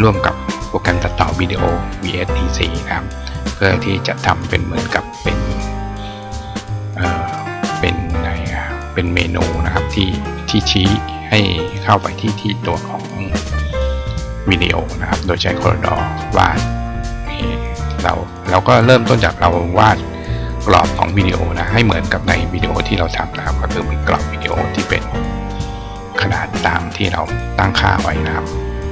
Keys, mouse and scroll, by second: 15.8 click, 16.5 click, 17.4 click, 18.0 click, 18.6 click, 22.3 click.